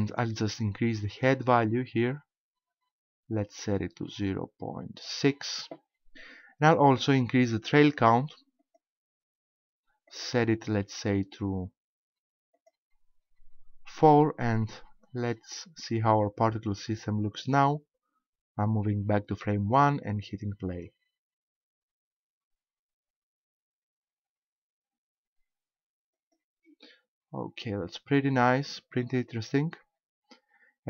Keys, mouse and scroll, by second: 0.7 click, 8.6 click, 10.1 click, 12.5 click, 14.7-16.2 scroll down 4, 17.3 click, 20.1 click, 26.1 click, 26.9 middle click.